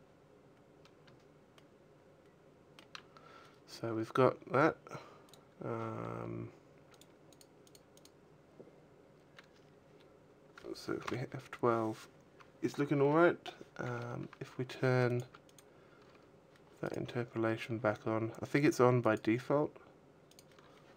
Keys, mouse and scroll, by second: 1.3 shift+middle click, 5.0 click, 6.5 click, 6.9 click, 7.3 click, 7.6 click, 14.0 Escape, 14.0 scroll down 8, 14.8 click, 15.2 click, 16.6 right click, 17.3-18.5 scroll down 4, 18.8 click, 20.2 click.